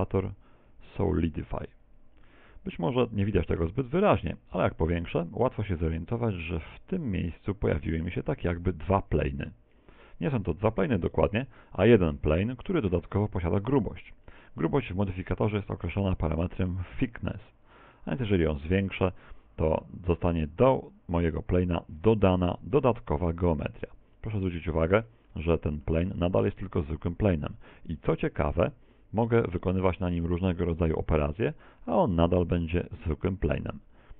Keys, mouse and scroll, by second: 4.2-5.3 scroll up 8, 7.4 scroll up 2, 8.6 z, 9.7 scroll down 3, 10.6 scroll down 4, 12.7 z, 17.9 click, 22.9 Tab, 24.2 middle click, 25.1 middle click, 25.5 shift+middle click, 26.1 middle click, 28.7 ctrl+r, 31.5 click, 32.1 right click, 32.5 right click, 33.2 shift+right click, 34.0 click.